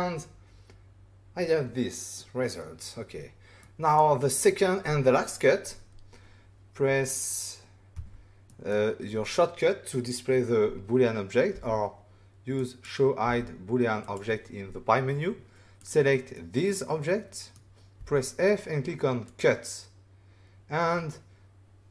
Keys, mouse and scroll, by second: 3.6 middle click, 7.9 <, 8.4 middle click, 11.5 f, 12.5 click, 13.2 f, 14.0 click, 15.7 click, 16.3 middle click, 19.2 click.